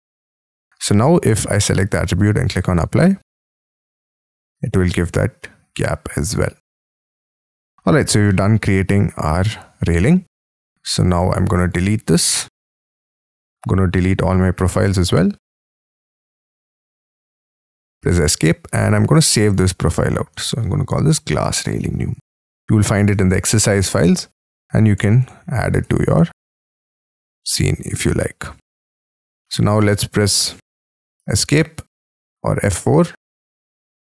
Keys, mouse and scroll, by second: 4.0 middle click, 5.0-5.4 scroll down 6, 5.4 middle click, 7.2 scroll up 4, 7.5 middle click, 7.9 scroll down 4, 8.3 middle click, 10.2-11.1 scroll down 13, 11.1-12.4 scroll up 4, 12.4 Delete, 13.6-14.3 scroll up 6, 14.3 Delete, 15.4 scroll down 5, 16.9 Delete, 17.4-17.8 scroll down 6, 17.8 Escape, 18.1 Escape, 18.3 scroll down 4, 20.5-28.1 typing, 29.0-29.4 scroll down 4, 29.4 middle click, 31.1 middle click, 31.4 Escape, 31.5-32.4 scroll down 3, 32.4 F4, 33.0 scroll down 2, 33.2 Escape, 33.5 Escape, 33.6 middle click.